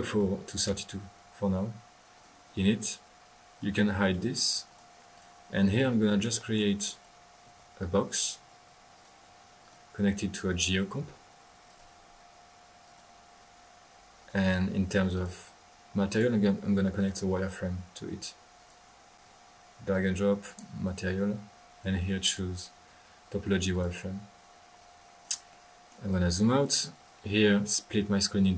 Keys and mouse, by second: 2.1 click, 2.7 middle click, 3.6-4.1 right drag, 4.4-5.1 typing, 4.6 click, 5.1 click, 5.4-6.9 drag, 7.4 b, 8.9 drag, 9.7-10.0 drag, 10.0-11.3 typing, 10.5 right click, 11.6-12.0 drag, 12.8 drag, 14.2 click, 15.0-15.7 drag, 16.1-16.6 drag, 17.0-17.4 drag, 18.6 click, 19.2 click, 20.1 click, 22.2 click, 23.7 click, 24.7 click, 25.5 middle click, 26.1 click.